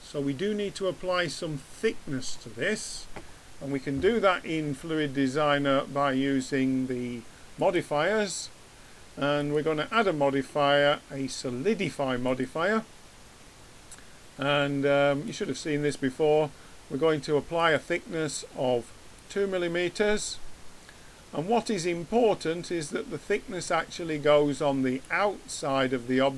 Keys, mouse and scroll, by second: 3.7-6.4 middle drag, 7.6-11.2 drag, 15.2-17.2 drag, 17.5-20.9 drag, 20.9-22.1 middle drag, 22.8 middle click, 25.0-26.3 drag.